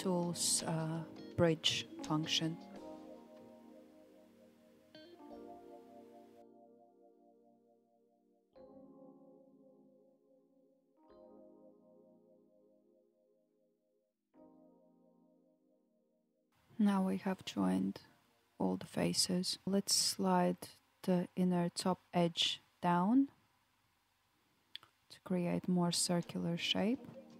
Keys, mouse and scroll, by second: 0.7 click, 1.6 shift+click, 2.9 f, 3.5-5.3 shift+middle drag, 5.3 click, 6.4 shift+click, 8.3 f, 9.7-10.9 shift+middle drag, 10.9 click, 11.8 shift+click, 12.8 f, 13.3-17.3 shift+middle drag, 17.3-18.6 scroll down 3, 18.6 KP_1, 20.0 g, 23.6 g.